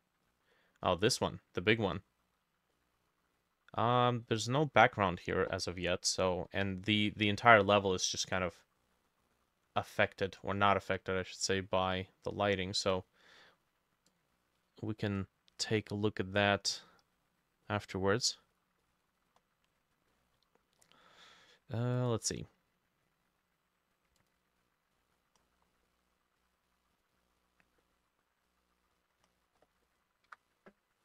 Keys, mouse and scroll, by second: 0.3 middle click, 1.8 middle click, 2.8 middle click, 3.4-3.8 scroll up 4, 3.8-4.3 scroll down 2, 4.3 middle click, 8.2 middle click, 10.8 middle click, 11.4 middle click, 14.6-15.2 scroll up 1, 15.2 scroll up 5, 17.7 scroll up 3, 17.7 middle click, 18.9 middle click, 19.2-19.7 scroll up 2, 19.7-20.1 scroll down 2, 20.1 middle click, 20.8-21.2 scroll down 3, 22.9 scroll down 1, 25.2-25.9 scroll down 20, 25.9 middle click, 27.8 middle click, 29.3-29.9 scroll up 11, 29.9 middle click, 30.3 F6.